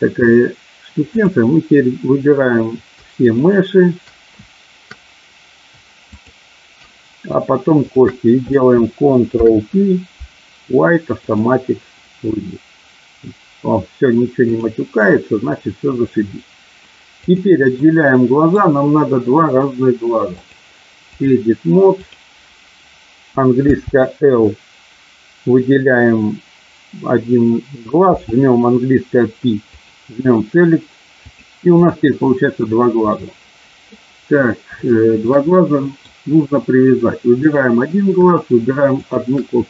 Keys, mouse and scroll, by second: 3.2 shift+click, 6.2 shift+click, 7.7 shift+click, 9.2 ctrl+p, 14.5 click, 17.3 click, 17.7 middle click, 20.4-21.4 drag, 22.0 click, 23.6 l, 28.0 p, 31.2 click, 33.1 middle click, 34.7 shift+middle click, 35.5 middle click, 37.5 click.